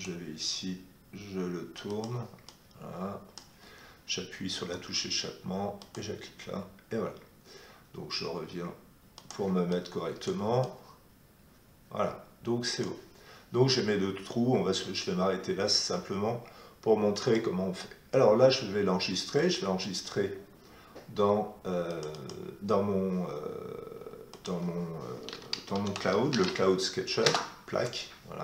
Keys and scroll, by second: 4.5 Escape, 26.3 e, 27.2 Return.